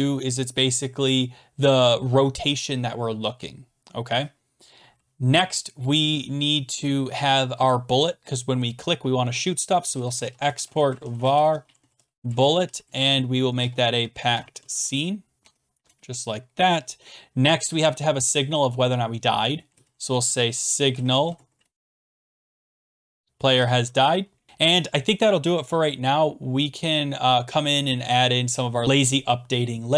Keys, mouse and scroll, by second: 0.8-2.6 typing, 9.6-15.2 typing, 15.4 Tab, 15.9 Return, 19.5-23.9 typing, 28.4 click, 28.4 click, 28.8 click.